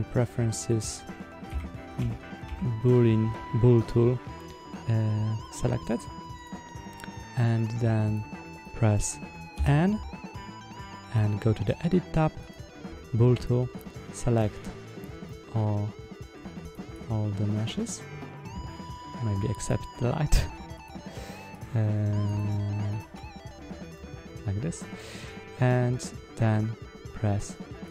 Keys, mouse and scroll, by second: 8.4 click, 9.4 n, 10.9 click, 12.3 click, 13.6-14.4 drag, 15.1-16.2 middle drag, 16.5 click, 16.8-17.6 drag, 19.4 ctrl+click, 20.7 shift+click, 21.4 click, 22.2 drag, 22.8 shift+click, 23.8-26.4 middle drag, 27.8 click.